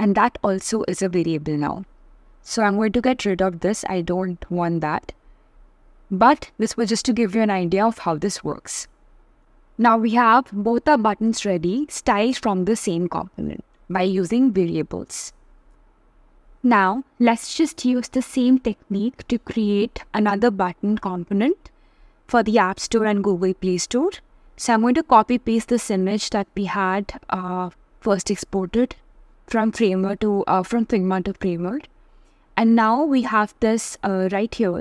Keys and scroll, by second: 22.9 super+c, 23.1 super+v.